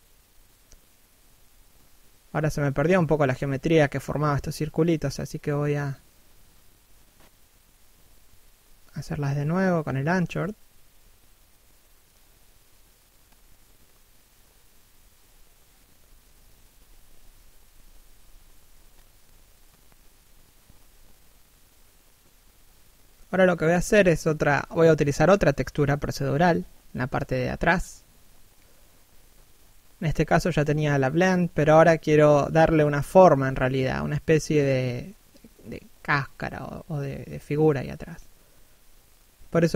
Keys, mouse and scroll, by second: 0.4 click, 3.1 click, 4.0 scroll down 1, 4.2 middle click, 6.3 scroll up 1, 6.9 click, 8.0 click, 9.3 shift+middle click, 10.7 click, 11.8 scroll down 1, 12.0 middle click, 12.8 scroll up 1, 13.3 click, 14.2 scroll down 1, 14.4 middle click, 16.7 scroll down 1, 17.0 shift+middle click, 21.7 middle click, 34.9 click.